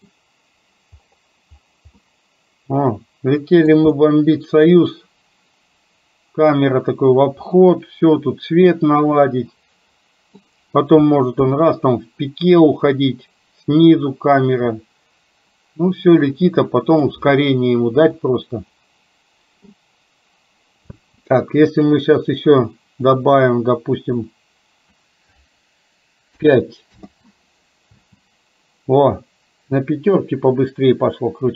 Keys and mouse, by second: 2.0-3.6 middle drag, 4.0-10.4 middle drag, 11.6-17.3 middle drag, 18.2-19.8 middle drag, 21.0 space, 21.8-27.1 drag, 28.1 space.